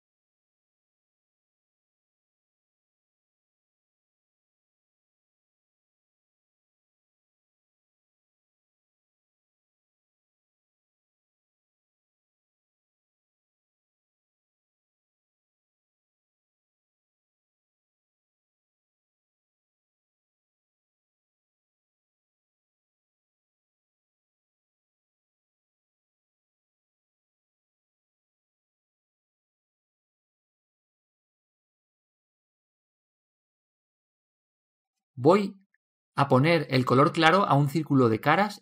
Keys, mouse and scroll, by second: 1.7 click, 8.4 click, 18.5-23.7 right drag, 22.5-28.0 middle drag, 24.2-26.0 right drag, 28.6-31.0 drag, 30.4 middle click, 31.1-32.8 drag, 31.1-32.8 middle drag, 32.8 alt+z, 33.5-35.5 middle drag, 35.5-36.3 scroll down 1, 36.9 alt+h, 37.8-38.6 middle drag.